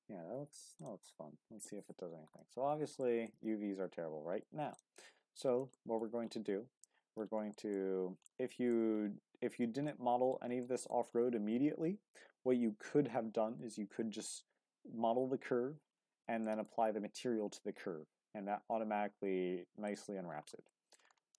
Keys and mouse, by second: 3.0 shift+drag, 5.7 shift+click, 6.8 Tab, 7.5 shift+middle click, 8.5 shift+middle click, 9.9-10.3 middle drag, 10.6-10.9 middle drag, 13.6-14.2 middle drag, 16.4 shift+middle click, 19.8 click, 20.7 shift+middle drag.